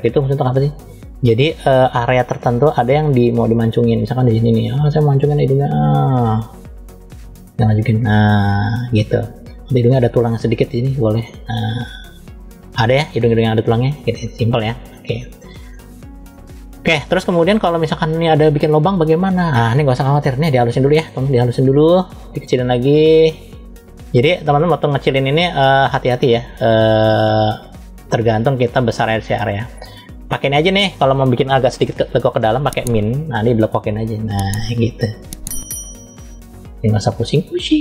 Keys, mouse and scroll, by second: 0.5-0.9 scroll down 1, 1.9 f, 4.4 middle click, 7.1 click, 8.7 middle click, 10.4 click, 12.8 click, 13.6-14.8 middle drag, 15.2-15.6 scroll up 2, 15.6 middle click, 17.0-18.0 middle drag, 20.3 click, 22.3 f, 23.4 click, 25.4 click, 30.3 click, 32.8 click, 33.5 click.